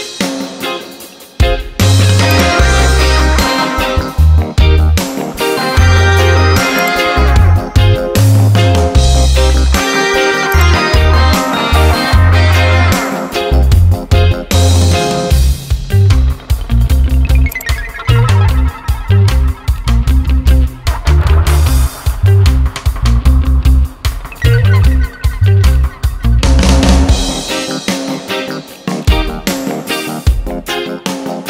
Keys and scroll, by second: 4.6 ctrl+d, 13.7 ctrl+d, 20.7 ctrl+d, 22.7 ctrl+d, 27.0 ctrl+d, 31.0 ctrl+d.